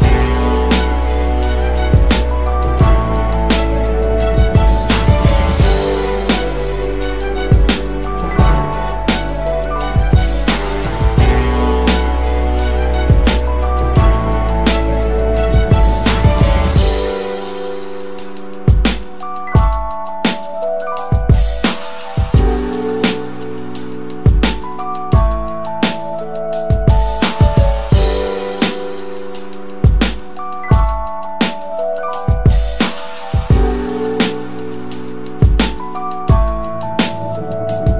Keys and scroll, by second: 12.7 ctrl+shift+].